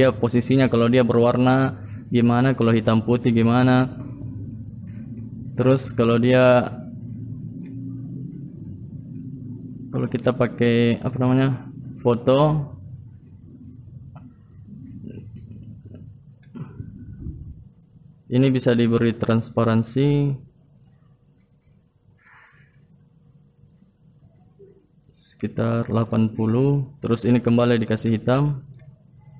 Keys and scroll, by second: 3.9 ctrl+v, 9.3 ctrl+Home.